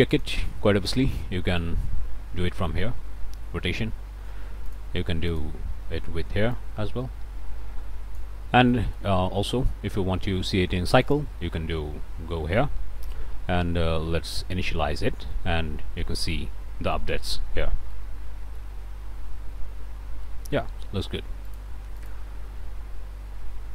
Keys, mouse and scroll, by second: 0.1 click, 1.6-4.5 drag, 4.7 click, 6.5-8.4 drag, 8.7 click, 9.3 middle click, 11.0 click, 15.3 middle click, 17.0-17.3 scroll up 1, 17.9 middle click, 20.3 middle click, 21.5 click, 22.0 click.